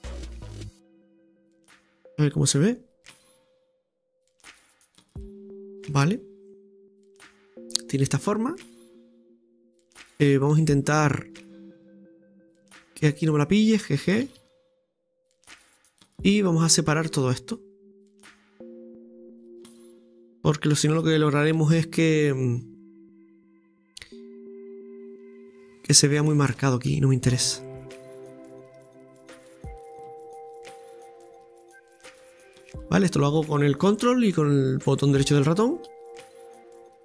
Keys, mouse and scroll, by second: 0.6 right click, 1.1 g, 2.3-3.6 scroll down 2, 3.6 click, 4.0 Tab, 4.5-6.0 middle drag, 6.0-7.3 scroll up 3, 7.4-10.0 shift+middle drag, 10.0 Tab, 11.5-13.1 drag, 13.2 right click, 14.2 g, 16.4-22.1 middle drag, 22.4-25.2 ctrl+drag, 25.2 g, 27.6 middle click, 28.4 right click, 28.9-30.2 g, 29.6 click, 29.9 g, 31.8-34.8 ctrl+drag.